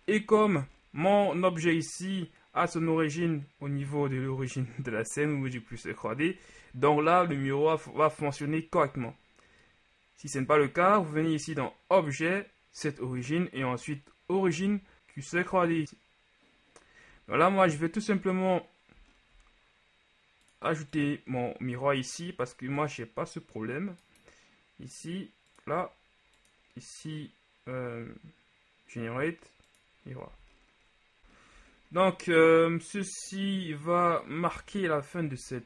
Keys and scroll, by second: 30.6 a, 35.5 shift+Tab.